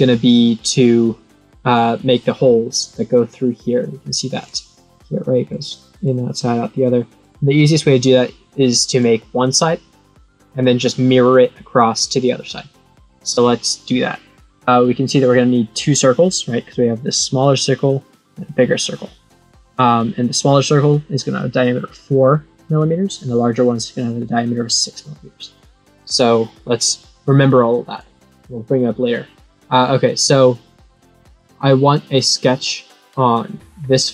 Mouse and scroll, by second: 4.3 click, 5.4 click, 6.8 click, 8.9-10.5 drag, 25.9 click, 32.1 click, 32.5 click.